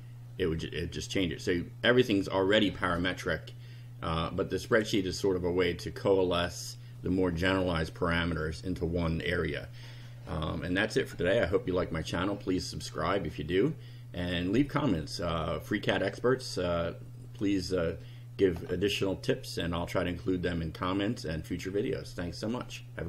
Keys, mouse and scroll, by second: 4.8 click.